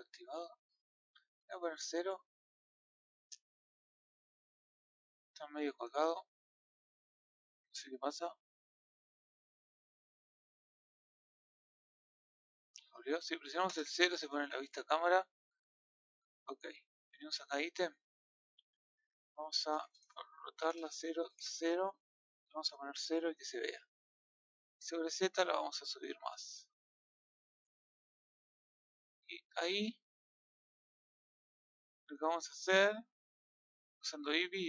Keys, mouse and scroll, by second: 12.1-13.6 middle drag, 13.6 KP_0, 14.5-15.2 scroll down 6, 15.2-15.9 scroll up 1, 15.9 KP_3, 17.7 click, 19.8-21.8 drag, 21.8-22.2 scroll up 5, 22.2-22.5 scroll down 5, 22.5 KP_0, 23.1-23.9 scroll down 3, 24.7-27.7 drag, 29.8-30.2 scroll up 5, 33.2 click.